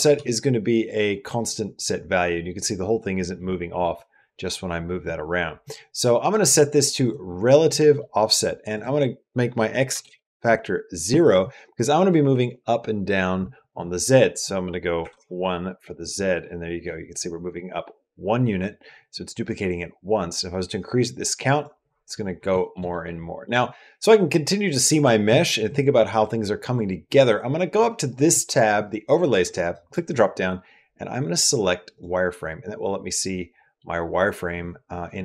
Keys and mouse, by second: 0.0 g, 5.4 click, 6.8 click, 7.8 middle click, 8.7-9.9 drag, 14.1 click, 16.0 middle click, 20.8 click, 21.1 click, 21.3 click, 22.4 shift+middle click, 22.7 middle click, 23.3 middle click, 29.7-32.4 drag, 33.2 middle click.